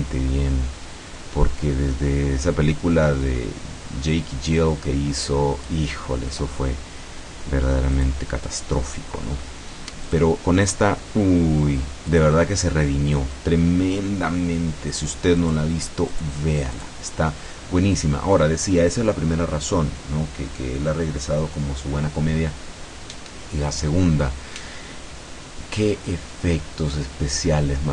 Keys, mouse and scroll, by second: 8.0 click, 9.4 middle click, 10.1 click, 10.4-12.1 middle drag, 12.1 click, 15.5 click, 16.1 click, 16.8 click.